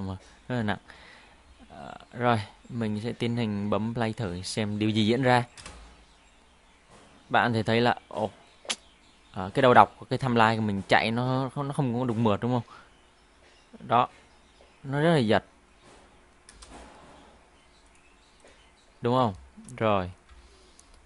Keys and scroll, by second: 5.6 space, 16.6 space, 20.3 Home.